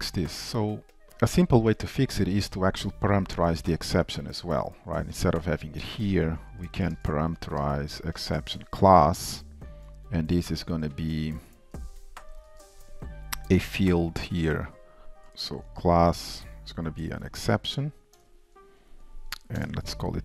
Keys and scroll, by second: 0.2 shift+super+F12, 9.2 ctrl+w, 9.2 alt+Up, 15.2 ctrl+w, 15.2 alt+Up.